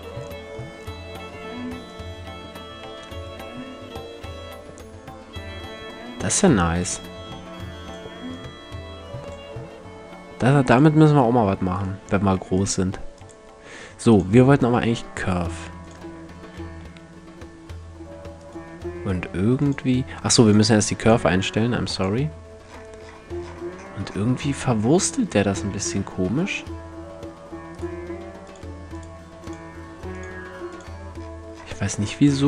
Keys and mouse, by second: 14.7-15.5 middle drag, 16.4 g, 17.2-17.7 middle drag, 18.1 click, 22.3-25.5 middle drag, 25.5 g, 32.1 x.